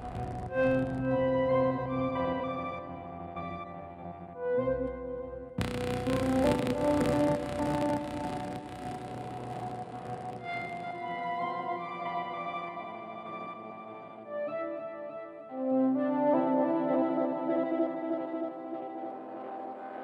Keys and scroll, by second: 13.2 shift+F5.